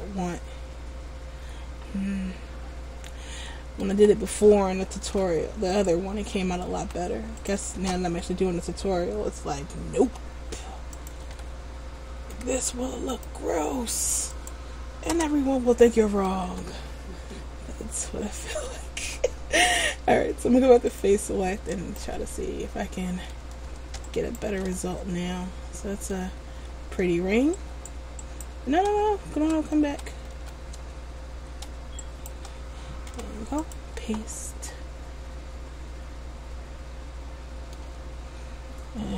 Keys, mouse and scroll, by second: 5.3 s, 6.9 s, 8.0 ctrl+z, 10.3 r, 11.4 ctrl+z, 12.5 k, 16.6 a, 17.1-17.5 scroll down 2, 17.5 middle click, 21.1 click, 21.9 alt+right click, 22.4 middle click, 24.3 alt+shift+right click, 24.9 middle click, 27.7 alt+right click, 30.0 ctrl+z, 30.5 ctrl+z, 32.2 shift+right click, 33.3 p, 34.8 middle click.